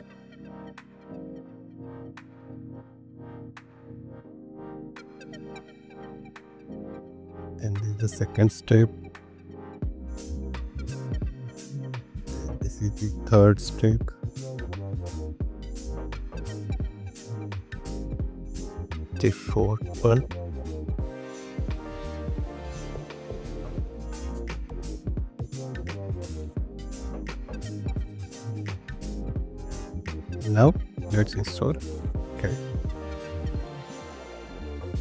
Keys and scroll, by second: 7.3 super+c, 9.6 super+v, 13.4 super+c, 16.0 super+v, 19.6 super+c, 23.5 super+v, 31.4 super+c, 33.6 super+v.